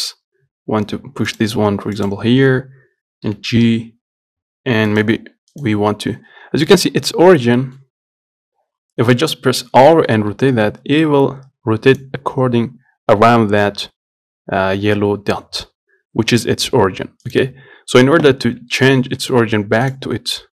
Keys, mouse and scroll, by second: 2.2 click, 3.5 g, 5.8 right click, 6.7 scroll up 2, 6.9-8.3 middle drag, 8.3-8.8 scroll up 1, 10.1 r, 16.7 middle click, 17.5-18.7 right drag, 18.7-19.0 scroll down 1, 19.0 shift+middle click, 19.2 scroll up 1, 19.5 middle click, 20.2-20.5 right drag.